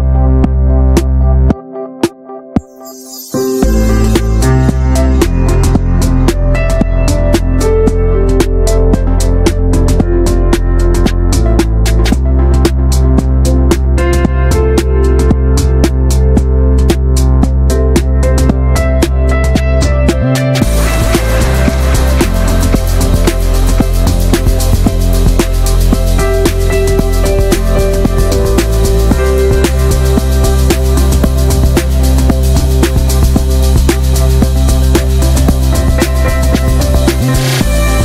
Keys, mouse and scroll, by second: 0.0 3, 0.1 click, 0.7 alt+z, 0.9 click, 1.2 alt+z, 1.3 middle click, 2.1 click, 2.6 alt+z, 2.7-3.2 scroll down 4, 2.8 middle drag, 3.0 Tab, 3.2-3.6 shift+middle drag, 3.6 click, 3.7-4.4 right drag, 4.4-4.8 shift+middle drag, 4.8 drag, 5.1 Tab, 5.3-6.5 shift+middle drag, 6.5 2, 6.7-7.0 drag, 7.0-7.4 shift+middle drag, 7.4 shift+click, 7.6-8.3 shift+middle drag, 8.3 ctrl+b, 9.8 scroll down 5, 10.0 middle click, 10.1 scroll up 1, 10.2 drag, 10.5-11.0 shift+middle drag, 11.0 ctrl+s, 11.6-12.2 shift+middle drag, 12.2 ctrl+s, 12.4-12.8 middle drag, 12.8 ctrl+s, 12.9 drag, 13.0 shift+middle click, 13.2 scroll up 1, 13.3 middle click, 13.5 shift+a, 14.5 alt+middle drag, 14.7 ctrl+s, 14.9-15.3 shift+middle drag, 15.3 click, 15.8 shift+middle click, 15.9 scroll up 1, 16.1 s, 16.7 click, 17.4 shift+middle click, 17.5 scroll up 2, 17.6 ctrl+s, 17.8 shift+middle click, 20.2 click, 21.1 ctrl+s, 21.3 shift+middle click, 21.4 shift+scroll up 1, 22.7 shift+middle click, 22.9 scroll up 1, 23.0 ctrl+s, 23.3-24.5 drag, 24.5 shift+middle click, 24.6 scroll up 1, 24.8 ctrl+s, 25.7 shift+middle drag, 25.8-26.1 scroll up 2, 26.1-27.2 drag, 27.2-27.6 shift+middle drag, 27.6 ctrl+s, 27.7 scroll down 2, 27.9 ctrl+middle click, 28.1 ctrl+a, 28.4 scroll down 1, 28.6 middle drag, 28.7 ctrl+s, 29.2-29.5 scroll down 1, 29.5 n, 30.5-30.9 drag, 30.9-31.7 middle drag, 31.7 ctrl+s, 32.1-32.7 scroll up 4, 32.3 alt+middle drag, 32.7 shift+middle click, 32.9 Tab, 33.4 alt+z, 33.6 click, 33.8 alt+z, 34.0 click, 34.3-34.8 middle drag, 34.8 3, 34.9 click, 35.1-35.6 shift+middle drag, 35.6-36.7 drag, 36.7 middle click, 37.0 scroll up 1, 37.2-37.8 shift+middle drag, 37.8-38.0 drag.